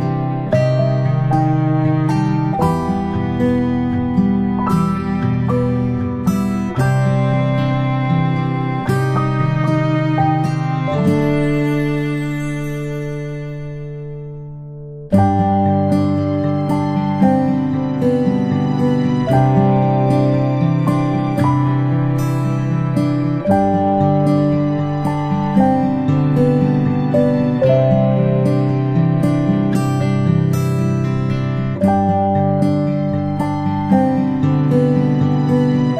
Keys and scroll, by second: 0.0-0.7 typing, 4.9 space, 5.0 space, 5.1 space, 5.9-10.1 space, 11.5 space, 11.6 space, 14.4 space, 14.6 space, 19.3 space, 21.1 space, 22.6 space, 22.8 space, 24.0 ctrl+space, 24.8 ctrl+space, 25.8 space, 29.1-30.0 space.